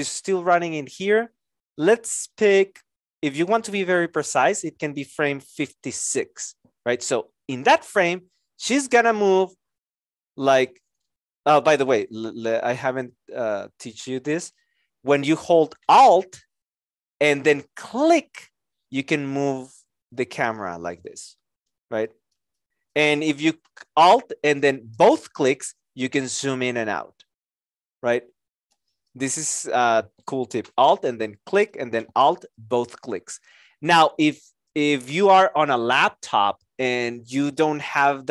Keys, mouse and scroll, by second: 8.9 shift+click, 10.8 z, 24.9 alt+click, 32.5 alt+click.